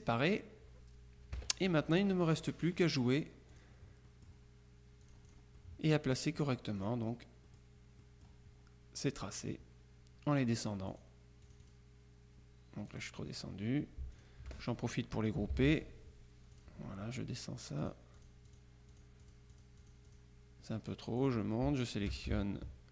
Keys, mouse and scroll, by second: 0.0 click, 1.4 KP_Subtract, 2.2 middle click, 2.7 click, 3.6 click, 5.1 click, 6.9 click, 7.5 click, 11.0 click, 11.7 click, 13.0 click, 14.2 shift+click, 15.6 ctrl+g, 16.7 click, 17.9 click, 21.3 click, 21.9 shift+click.